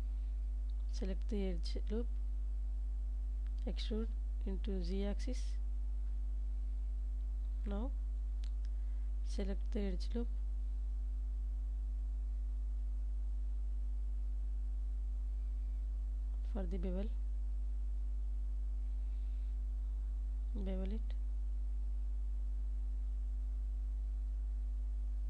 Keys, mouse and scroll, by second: 0.7 2, 2.3 e, 3.9 z, 6.2 click, 6.9 middle click, 7.8 ctrl+s, 8.5 Tab, 9.0-10.5 middle drag, 11.4-12.6 middle drag, 13.1 KP_7, 15.0 Tab, 16.0 middle click, 17.2 alt+click, 18.5 ctrl+b, 25.1 shift+click.